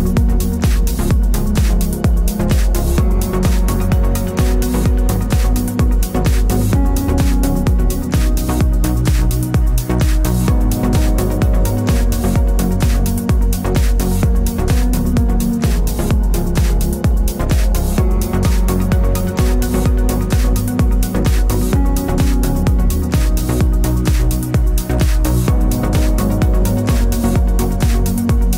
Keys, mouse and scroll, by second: 1.8 Up, 3.8 [, 4.9 click, 5.6 [, 6.2 click, 6.9 [, 8.1 click, 11.7 click, 12.3-14.4 typing, 15.1 click, 16.4 ctrl+z, 17.5 click, 18.2 Up, 21.8 click, 23.6 Down, 25.2 Return.